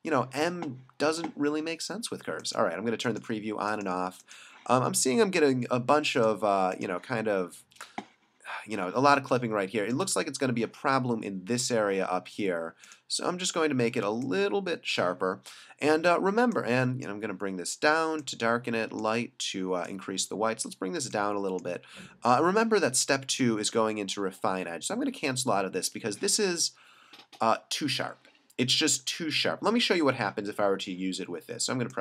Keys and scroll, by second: 9.2 space, 14.1 space.